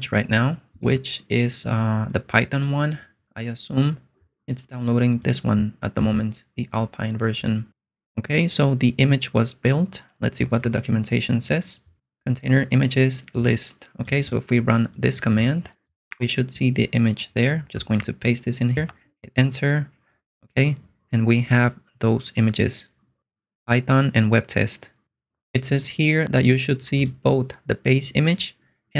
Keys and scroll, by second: 10.6 super+Tab, 16.1 super+Tab, 18.0 super+v, 18.9 Return.